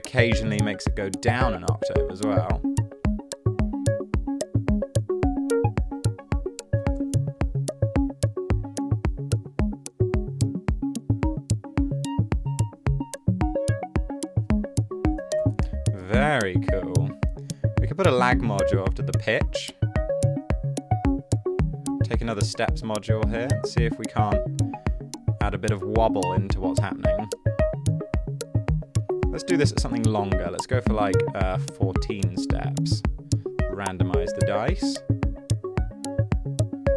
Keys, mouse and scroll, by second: 6.9 typing, 7.0 Return, 15.2-16.0 typing, 31.2-32.0 typing.